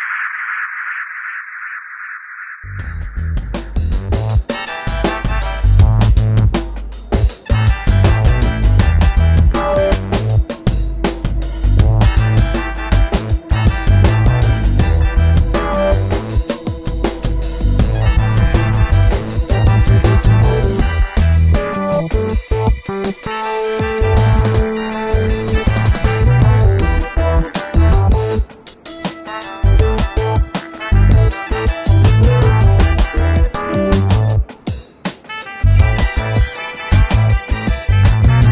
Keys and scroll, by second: 2.4 b, 3.9 [, 6.5 v, 7.6 super+t, 10.6 Return, 13.3 Return, 13.5 alt+super+0, 13.9 super+-, 17.1 super+-, 19.9 alt+t, 21.2 Return, 22.5 b, 27.7 v, 28.2 b, 30.1 v, 30.7 super+t, 32.3 Return, 33.2 super+t, 38.1 Return.